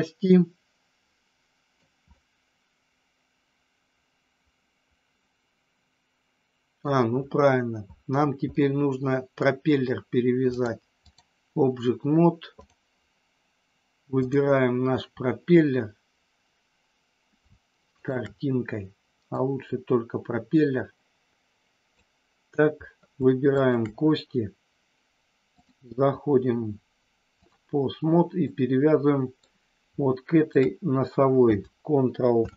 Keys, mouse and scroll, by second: 2.1 scroll up 1, 2.2-6.9 middle drag, 8.5 middle click, 9.4 scroll down 1, 10.5 click, 12.5 click, 14.2 click, 17.9 shift+click, 19.5-22.0 drag, 23.6 shift+click, 25.6-27.5 drag, 28.4-29.4 middle drag, 30.2 shift+click, 32.2 ctrl+p.